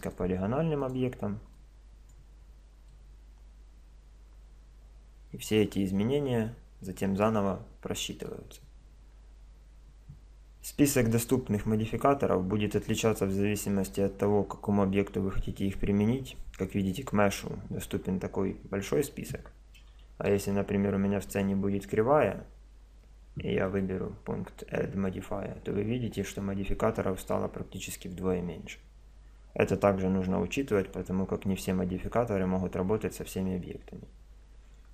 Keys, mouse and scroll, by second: 0.9-2.5 right drag, 1.6-4.9 drag, 2.5 Tab, 6.9-8.8 middle drag, 16.7-18.5 drag, 20.1 shift+a, 23.7-25.5 drag.